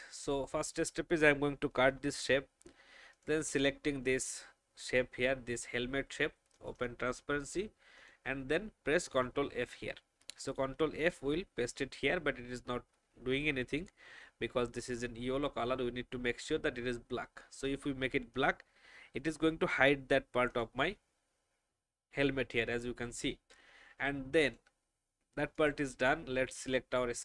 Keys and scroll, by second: 2.0 ctrl+x, 9.5 ctrl+f.